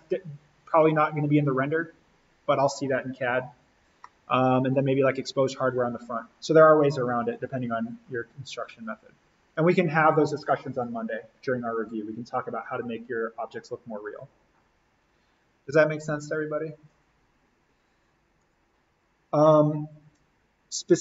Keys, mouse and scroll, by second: 0.7-2.3 scroll down 1, 2.3-4.0 scroll up 1, 4.0-7.8 middle drag, 8.2-10.5 scroll up 1, 18.4 click.